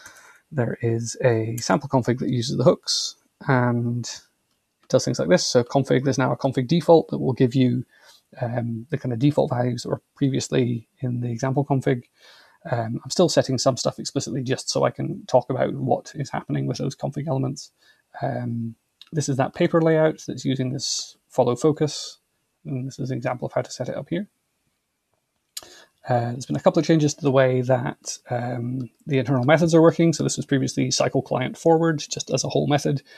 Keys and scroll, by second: 0.0 /, 0.1 Tab, 1.5 Return.